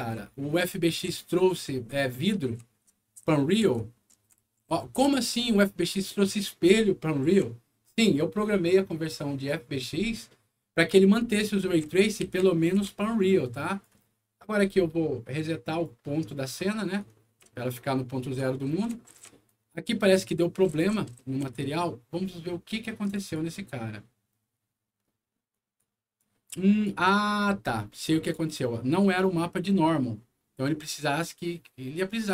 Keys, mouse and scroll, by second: 0.0-1.5 right drag, 0.6 s, 2.1-7.9 right drag, 2.8-3.7 typing, 4.8 s, 7.2 a, 11.4-13.7 right drag, 11.6-13.2 typing, 14.5 middle click, 15.6 click, 16.9-19.4 right drag, 17.1-19.8 typing, 20.0 click, 20.6 right click, 20.8 s, 21.1 q, 22.9 click, 23.1 click, 25.4 right click, 26.1 click, 27.4 scroll up 1, 28.2 click, 31.9 click.